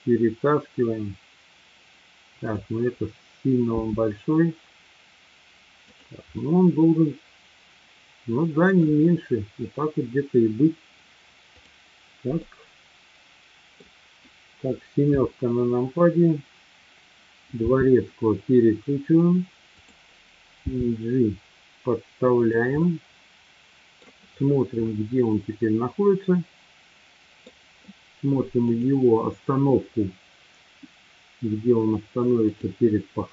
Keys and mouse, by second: 2.4 click, 3.7 s, 5.8 click, 6.4-8.9 middle drag, 11.5 click, 12.4-13.8 middle drag, 15.1 KP_7, 17.5 r, 20.7 g, 22.4 click, 22.8-24.1 middle drag, 25.7-27.6 middle drag, 30.4-32.3 drag.